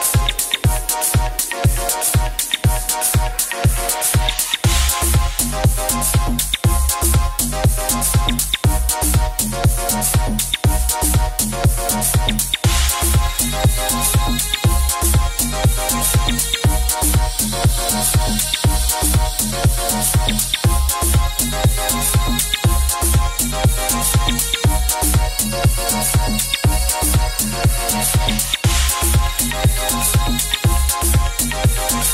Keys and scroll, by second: 14.6 e, 18.7 c, 25.4 ctrl+z, 26.5 ctrl+z, 27.4 ctrl+z.